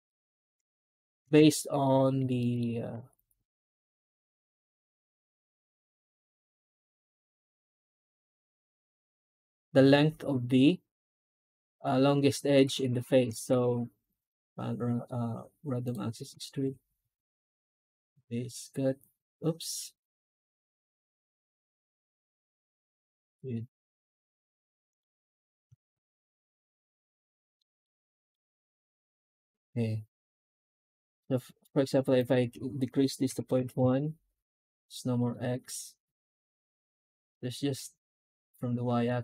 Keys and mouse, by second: 0.9 shift+h, 1.2 Tab, 1.7 middle click, 2.3 shift+middle click, 5.9 shift+middle drag, 6.3 alt+a, 6.7 alt+shift+right click, 12.5 a, 12.9 Tab, 27.4 middle drag, 27.9 shift+middle click, 28.5 F9, 38.9 middle drag.